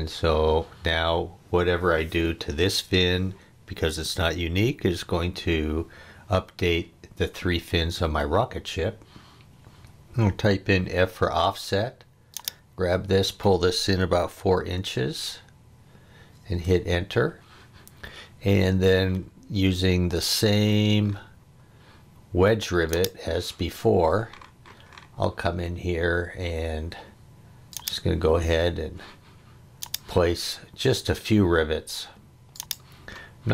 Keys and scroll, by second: 10.9 f, 14.4 4, 16.5 Return.